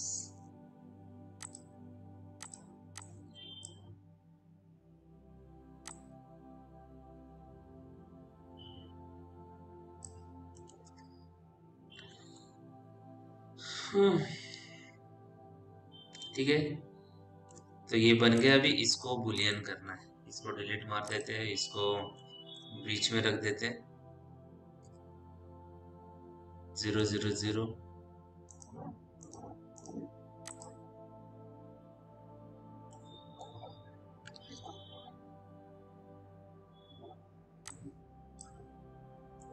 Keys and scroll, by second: 11.3 p, 20.8 Delete, 24.7 t, 35.1 ctrl+z.